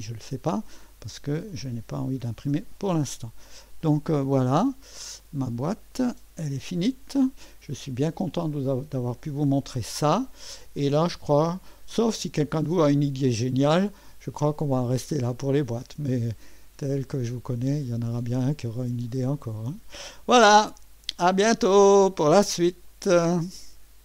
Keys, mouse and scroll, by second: 0.0 click, 1.5 click, 2.4 BackSpace, 3.8 click, 5.9 click, 6.9 Delete, 7.6-8.5 drag, 10.8-11.6 drag, 13.0-13.4 scroll up 1, 14.8-19.9 drag, 21.5-22.9 right drag, 22.9 click.